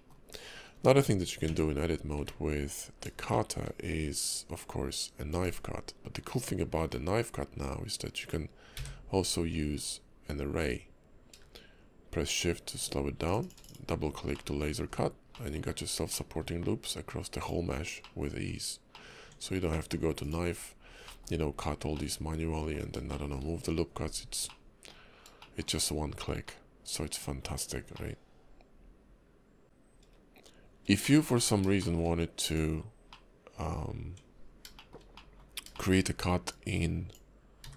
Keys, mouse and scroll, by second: 0.0 scroll up 2, 0.3-0.8 scroll down 3, 1.5 Tab, 1.8-2.2 scroll down 2, 2.2 `, 2.8 KP_5, 3.3 shift+middle click, 4.9 click, 6.9 click, 13.6 shift+click, 13.6 click, 14.3 middle click, 14.9 KP_5, 15.3 middle click, 15.7 scroll up 2, 16.1 middle click, 16.5 Tab, 18.0 middle click, 18.5 Tab, 18.9 middle click, 19.3 Tab, 19.7 middle click, 20.2 click, 21.0 middle click, 22.0 middle click, 23.1 shift+middle click, 24.0 scroll down 2, 24.5 middle click, 25.1 scroll up 2, 25.4 shift+middle click, 26.4 middle click, 27.4 scroll down 4, 27.9 middle click, 29.6 shift+middle click, 29.6 scroll down 2, 31.0 shift+middle click, 31.3-31.7 scroll up 3, 31.8 shift+middle click, 32.1-32.5 scroll up 1, 32.5 click, 33.1 middle click, 34.0 Tab, 34.8 shift+middle click, 35.1 middle click, 35.7 shift+middle click, 36.5 click.